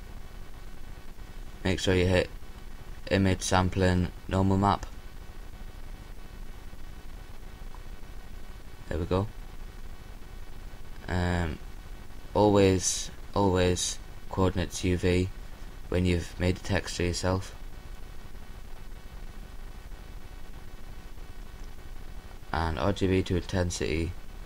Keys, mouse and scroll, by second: 12.4-24.4 drag.